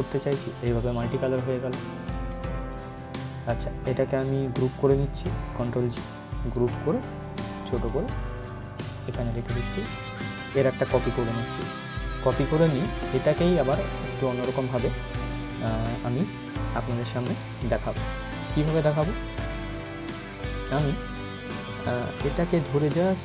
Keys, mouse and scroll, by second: 1.2 scroll down 1, 1.7 scroll up 1, 3.1-5.4 drag, 5.4 ctrl+g, 5.6-10.2 ctrl+drag, 10.2 right click, 10.9 click, 11.3 scroll up 1, 12.5 click, 12.7 right click, 13.9 click, 18.1 click, 22.1-23.2 drag.